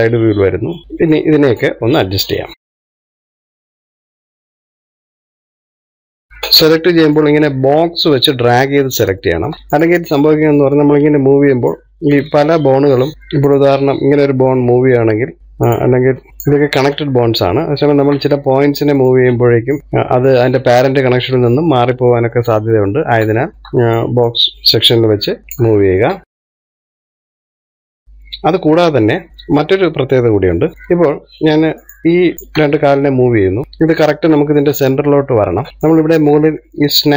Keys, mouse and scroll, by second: 0.1 KP_3, 0.8 click, 2.1 click, 2.6 click, 3.0 shift+middle click, 3.2-3.6 scroll up 1, 3.6 KP_3, 3.9 scroll up 1, 4.1 shift+middle click, 4.5 click, 4.9 click, 5.4 shift+middle click, 5.6-6.0 scroll down 4, 5.7 shift+middle click, 6.0-8.1 shift+middle drag, 8.1 click, 9.7 shift+middle click, 10.2 click, 11.7 click, 13.0 ctrl+z, 13.1-14.4 shift+middle drag, 14.4 click, 15.4 click, 16.0 ctrl+z, 16.7 click, 17.8 ctrl+z, 18.7 shift+middle click, 19.2-19.8 scroll up 1, 19.8 click, 20.6 ctrl+z, 21.0 scroll down 1, 21.7-23.9 shift+middle drag, 23.9-24.3 scroll up 1, 24.3 shift+middle click, 24.5 click, 25.0 click, 26.4 shift+middle click, 26.6 click, 27.0 click, 27.5 shift+middle click, 27.8-28.5 scroll down 1, 29.0-30.7 middle drag, 31.1-31.4 scroll up 1, 31.5 middle click, 32.4 click, 33.2 shift+click, 33.6-37.1 middle drag.